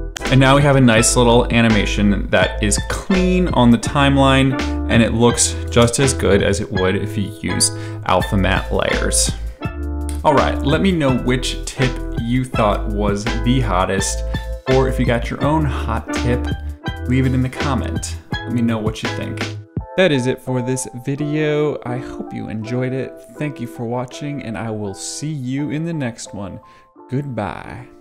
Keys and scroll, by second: 0.1 space, 5.7 space.